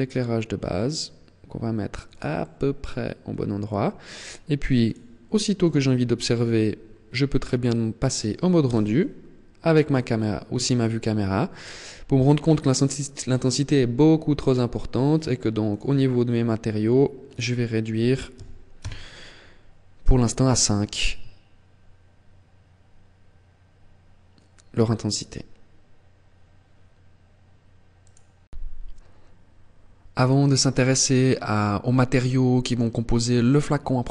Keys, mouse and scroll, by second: 1.8 click, 2.1 middle click, 4.5 click, 8.4 KP_0, 9.4-9.9 scroll up 3, 15.1 click, 16.9 click.